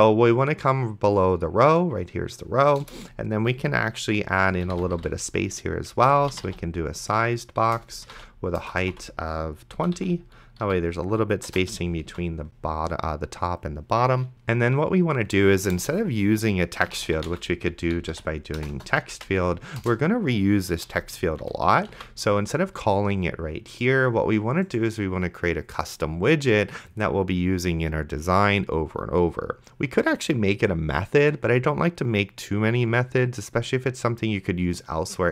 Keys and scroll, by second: 3.1 Return, 4.3-9.5 typing, 7.8 Return, 9.8 Delete, 10.0 End, 10.6 ., 11.5 BackSpace, 11.7 ,, 12.3 ctrl+s, 16.0 Return, 16.8-19.7 typing, 19.8 Return, 20.9 End, 21.4 ,, 22.2 ctrl+s.